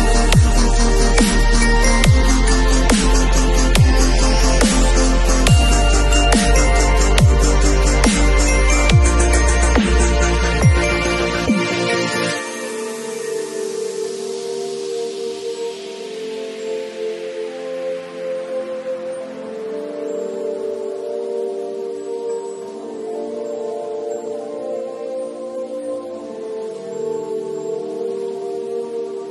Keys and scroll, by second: 1.5 [, 2.7 [, 6.1 [, 9.7 [, 11.3 ], 14.1 v.